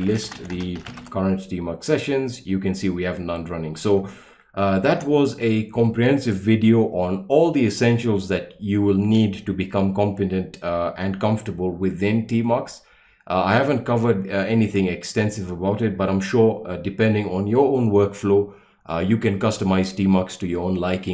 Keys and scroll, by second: 0.0-1.4 typing, 4.8 ctrl+l.